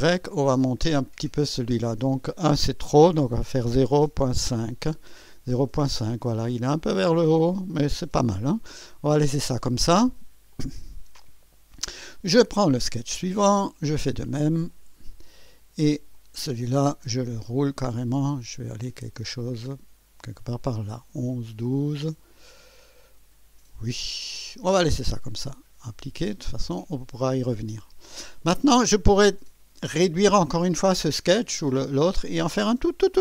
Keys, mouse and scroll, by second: 0.2 scroll up 2, 3.2-4.7 typing, 7.1 typing, 9.8 click, 10.5 click, 12.0 click, 14.3 click, 14.7 click, 16.1 click, 17.3 scroll up 2, 17.8 scroll up 2, 18.4-19.2 scroll up 3, 21.3 scroll up 2, 25.8 click, 26.8 click.